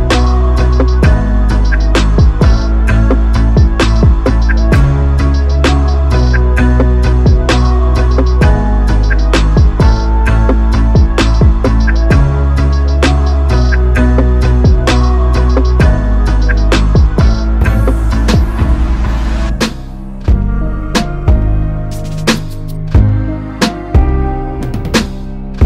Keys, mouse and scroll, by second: 2.9 i, 10.8 shift+s, 11.9 r, 16.1 s, 17.4 i, 22.5 shift+s, 23.4 r.